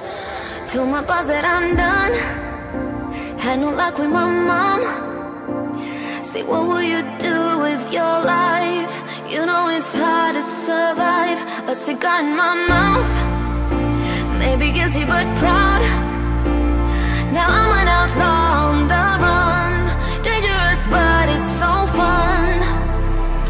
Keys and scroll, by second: 0.4 ctrl+], 7.1 ctrl+\, 7.5 ctrl+].